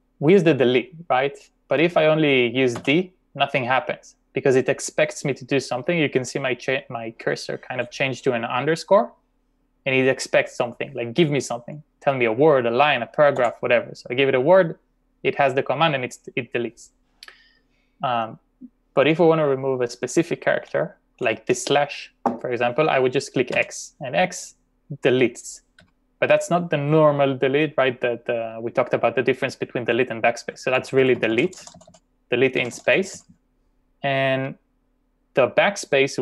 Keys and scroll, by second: 2.8 d, 13.4 w, 20.6 k, 21.2 j, 23.6 x, 25.8 x, 30.8-31.2 typing, 32.6 typing.